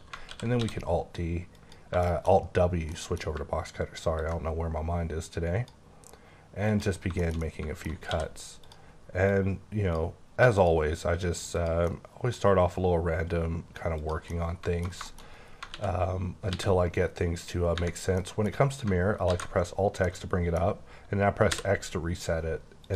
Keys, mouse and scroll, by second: 0.2 alt+w, 0.6 d, 1.5 click, 2.0 shift+middle click, 4.2 ctrl+click, 7.0 scroll down 2, 7.2 shift+middle click, 8.1 d, 8.6 click, 9.2 click, 10.6 click, 11.3 click, 11.5 double click, 11.9 middle click, 14.0 click, 14.3 middle click, 15.1 middle click, 15.3 scroll up 2, 15.7 x, 17.9 scroll down 2, 18.1 middle click, 19.2 x, 20.0 middle click, 21.5 x, 22.8 click.